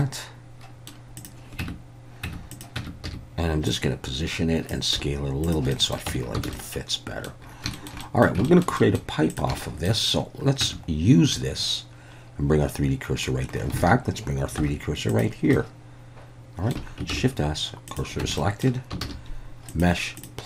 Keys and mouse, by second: 0.0-0.9 middle drag, 1.2 click, 1.6 Tab, 2.6 Tab, 2.6 click, 2.8 Tab, 3.1 a, 3.7-4.7 drag, 5.0 s, 5.5 click, 5.7 middle click, 6.2 Tab, 6.5 alt+a, 6.5-7.3 middle drag, 7.7 shift+middle drag, 8.0 middle drag, 8.5 shift+middle drag, 8.8 middle click, 9.6 shift+middle drag, 10.7 Tab, 11.3-13.3 middle drag, 13.8 alt+a, 14.6 3, 15.2 click, 15.6-16.7 middle drag, 17.1 shift+s, 18.2 Tab, 18.4 middle drag, 19.0 shift+a.